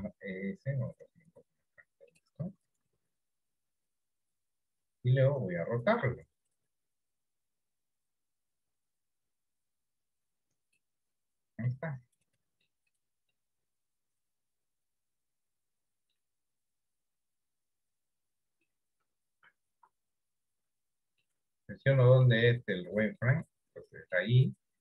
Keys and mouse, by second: 3.2-5.0 drag, 6.1 r, 11.8 middle click, 13.5-16.4 middle drag, 16.9-18.8 drag, 19.7 z, 21.4-22.7 middle drag, 23.8 shift+middle click, 24.2 middle click.